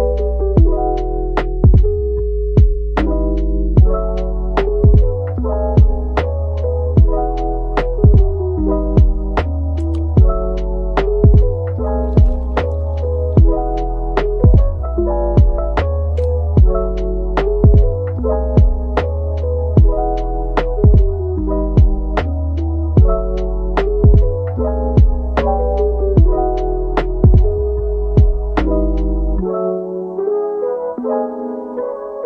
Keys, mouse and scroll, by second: 2.4 middle click, 4.1-4.4 scroll down 1, 4.4 middle click, 5.6 Tab, 7.2 middle click, 9.6 shift+right click, 10.2 a, 15.2-15.5 scroll down 1, 23.1-28.0 typing, 25.7 Return, 29.7 scroll up 1, 30.5 typing, 31.7 middle click.